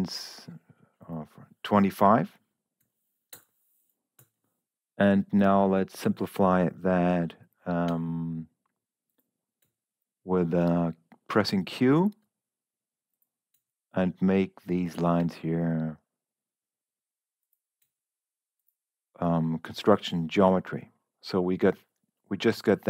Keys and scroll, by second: 2.4-3.3 typing, 4.1 Escape, 7.8 q.